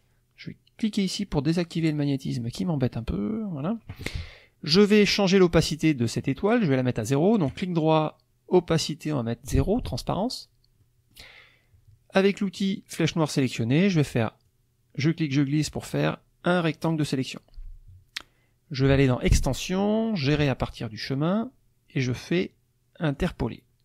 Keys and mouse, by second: 1.8 click, 3.0 click, 7.5 right click, 9.7 click, 10.8 middle click, 12.6 click, 14.4-17.1 drag, 19.1 click, 23.1 click.